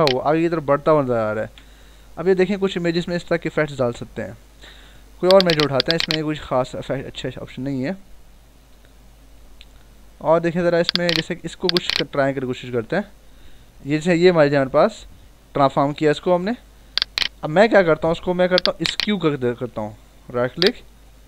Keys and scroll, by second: 1.3 Return, 14.5 ctrl+j, 15.1 ctrl+t.